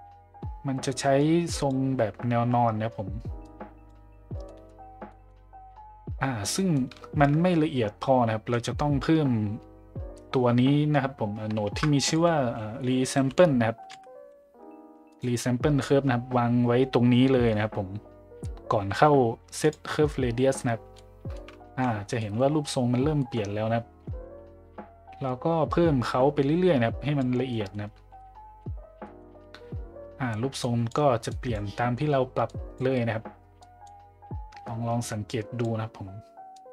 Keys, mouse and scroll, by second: 1.2 click, 3.5 click, 4.4 middle click, 5.1 middle click, 6.5 middle drag, 11.6 shift+a, 20.9-21.3 middle drag, 22.2 middle click, 23.2 middle click, 25.3-27.3 drag, 27.5 middle drag, 28.2-28.6 middle drag, 29.0 middle click, 30.6 click, 31.4 click, 32.4-32.8 drag, 33.7 click, 35.3 click, 36.6 click.